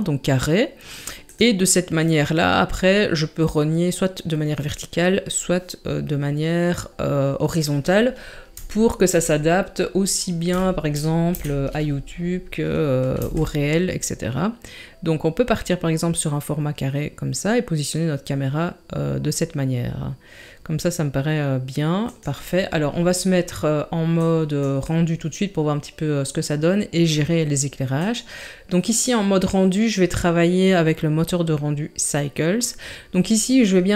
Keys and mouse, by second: 8.7-9.0 shift+middle drag, 9.4-9.9 middle drag, 10.6 shift+middle drag, 11.3 KP_3, 13.2 g, 24.3 click, 28.0 click.